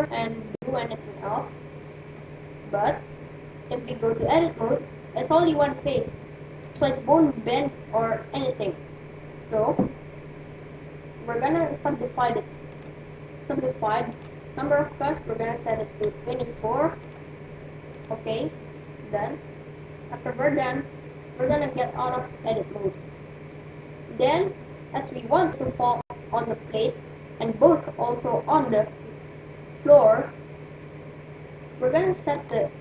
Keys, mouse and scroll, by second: 0.4-2.4 middle drag, 4.2 Tab, 4.6-8.2 middle drag, 4.8-6.3 scroll up 1, 12.8-15.9 drag, 18.2-19.6 drag, 18.8-20.4 middle drag, 21.6 Tab, 22.1-25.4 middle drag.